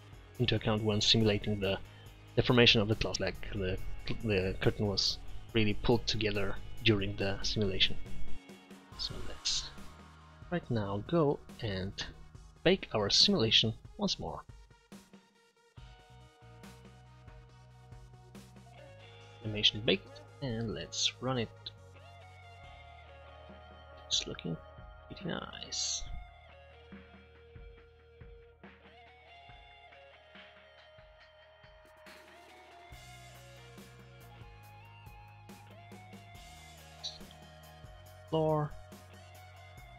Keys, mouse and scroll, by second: 30.2-32.3 middle drag.